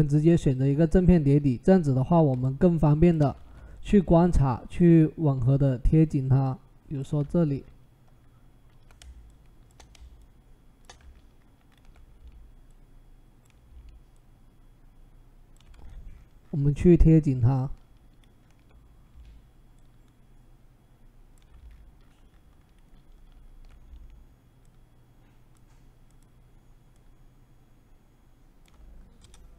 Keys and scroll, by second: 3.2 ctrl+t, 29.0 Return.